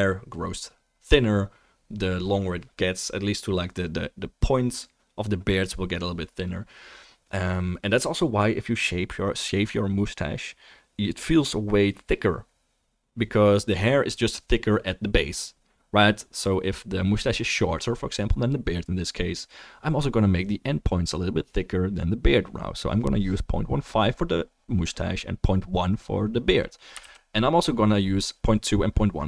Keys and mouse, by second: 26.8 ctrl+middle click, 27.6 ctrl+s, 28.7-29.2 drag, 28.7-29.2 right drag.